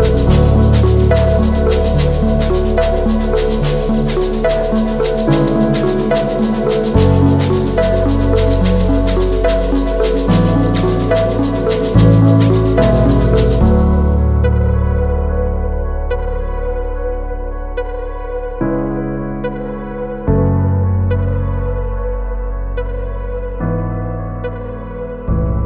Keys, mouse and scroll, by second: 4.7 Return, 7.5 ctrl+click, 10.9 ctrl+shift+i.